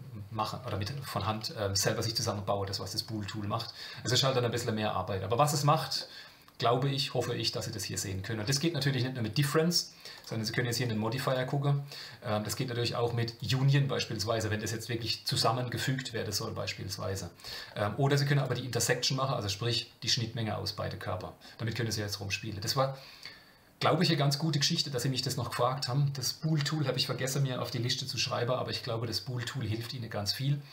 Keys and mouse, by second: 6.0-8.3 middle drag, 10.1 click, 10.8 click, 13.3 click, 18.4 click, 18.9-21.2 middle drag.